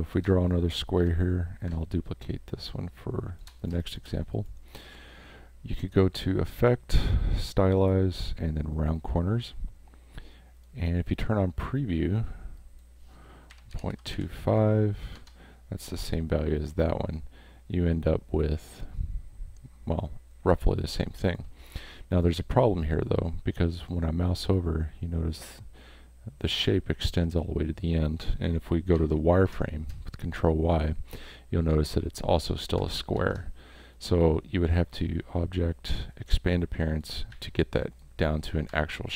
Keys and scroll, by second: 1.0 v, 3.7 space, 13.3-14.6 typing, 21.6 space, 28.9 ctrl+y, 33.1 ctrl+y, 37.3 a.